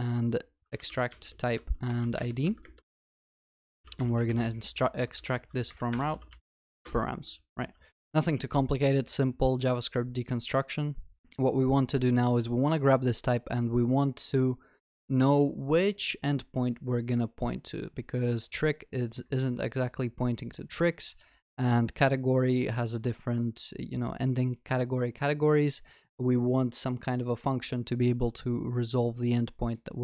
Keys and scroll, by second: 5.9 Return.